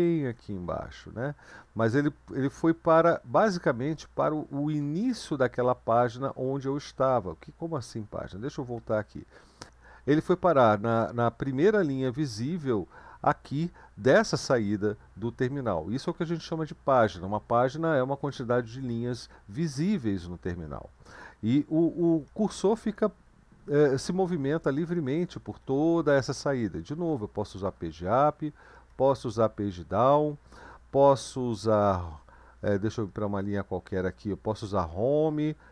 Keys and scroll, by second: 0.0 Down, 0.4 Down, 0.6 Down, 1.0 Down, 1.6 Up, 2.3 Up, 2.9 Down, 3.1 Up, 3.6 Up, 3.8 Up, 6.9-8.7 Down, 21.2 Up, 21.3 Up, 21.7 Up, 21.9 Up, 22.1 Up, 22.5 Up, 22.6-23.9 Up, 24.2 Up, 24.6 Up, 24.8 Up, 25.2 Up, 25.3 Up, 25.5 Up, 25.9 Up, 26.1 Up, 27.1 Page_Up, 27.5 Page_Up, 27.8 Page_Up, 28.3 Page_Down, 28.5 Page_Down, 28.7 Page_Down, 28.9 Page_Down, 32.4 Up, 32.5 Up, 32.7 Up, 32.9 Up, 34.6 Home.